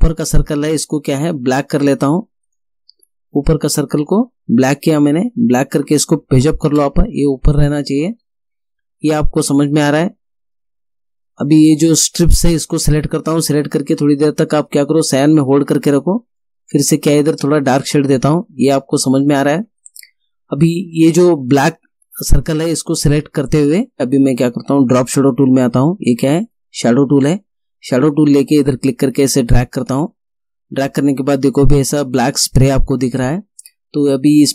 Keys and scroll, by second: 6.4 shift+Page_Up.